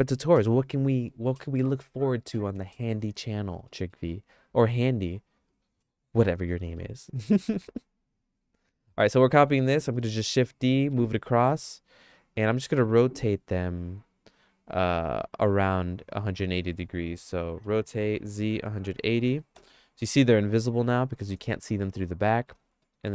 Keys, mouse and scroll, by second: 3.7 middle click, 6.4 middle click, 6.8 middle click, 7.3-9.5 shift+middle drag, 10.0 shift+d, 17.6 r, 21.2 middle click, 21.5-22.5 shift+middle drag, 22.8 shift+middle click.